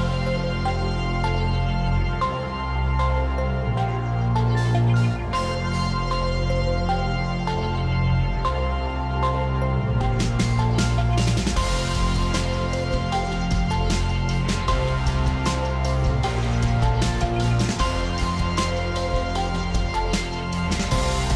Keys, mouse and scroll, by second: 3.2 alt+click, 4.7 click, 6.2 click, 8.9 click, 11.0 click, 11.6 click, 13.2 click, 13.3 ], 13.6 click, 13.6 ], 13.7 click, 13.9 click, 14.0 click, 14.3 click, 14.4 click, 14.8 click, 15.3 click, 15.5 click, 15.6 click, 15.8 click, 18.9 click, 19.3 click, 20.4 click.